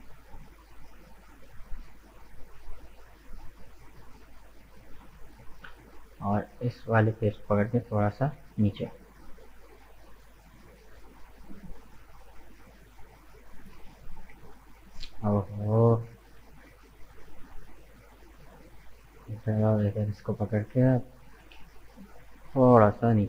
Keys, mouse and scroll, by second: 1.4-3.1 middle drag, 3.1-4.1 drag, 4.1 right click, 4.5-5.8 middle drag, 5.8 click, 6.8 right click, 7.1-8.3 middle drag, 8.3 g, 11.8-14.0 middle drag, 14.0 alt+shift+right click, 15.1 right click, 16.3 ctrl+z, 16.7 ctrl+z, 18.1 click, 19.1 alt+shift+right click, 19.8 alt+shift+right click, 20.1-21.6 middle drag, 21.6 KP_1, 22.5 g.